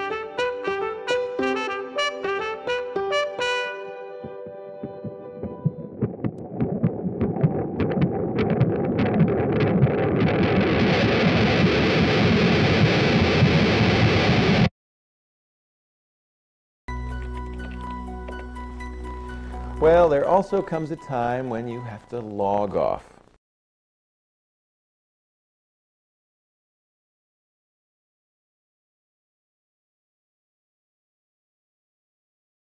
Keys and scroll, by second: 0.2 space, 4.2 ctrl+a, 9.8 ctrl+alt+y, 21.5 ctrl+alt+y.